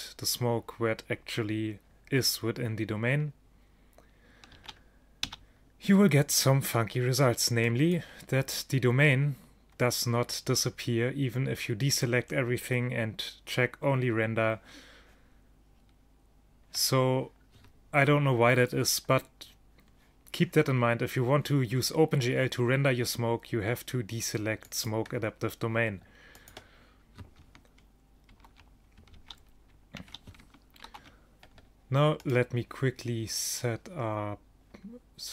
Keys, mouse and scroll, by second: 4.6 alt+a, 5.3 a, 7.8 click, 24.7-28.0 drag, 28.4 ctrl+shift+Down, 29.3 alt+a, 30.1 alt+a, 32.3-34.3 right drag.